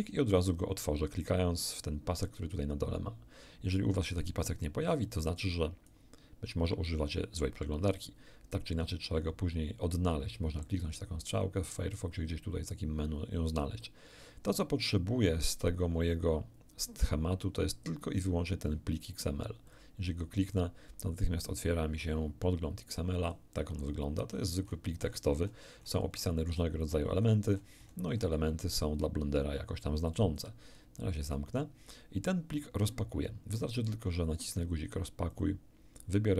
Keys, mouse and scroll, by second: 2.2 click, 5.0 click, 19.7 click, 21.4-23.5 drag, 24.2-24.6 scroll down 2, 25.0 scroll down 2, 26.2 scroll down 2, 30.1 alt+click, 31.2 click, 35.3 click.